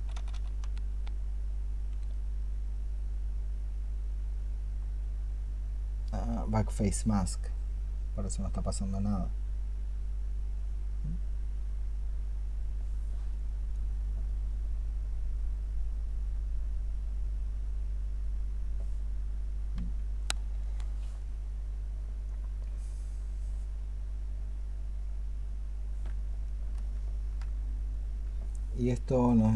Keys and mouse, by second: 0.0 ¡, 2.3 double click, 18.1 double click, 26.8 ctrl+click.